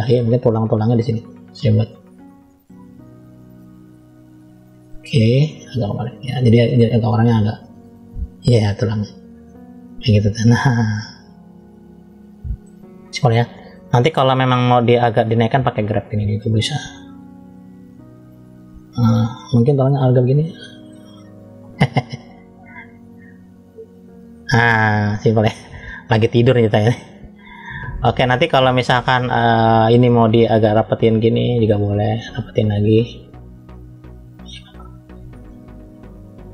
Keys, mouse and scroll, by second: 1.6 click, 8.8-9.3 scroll down 1, 9.3 middle click, 9.3 scroll down 1, 10.3-11.9 scroll up 2, 12.4 middle click, 15.0 click, 16.5 f, 17.8 click, 19.1 click, 19.7 click, 20.2 click, 20.7 click, 21.5 click, 21.9 click, 22.4 click, 22.8 click, 23.1 click, 23.7 click, 24.4 middle click, 26.2 middle click, 27.0-27.5 scroll up 1, 27.5 middle click, 28.5 scroll down 2, 29.9 middle click, 30.6 click, 31.7 click, 32.3 click, 32.8 click, 33.3 click, 34.0 click, 34.4 click, 35.1 click, 35.6 click, 36.3 click.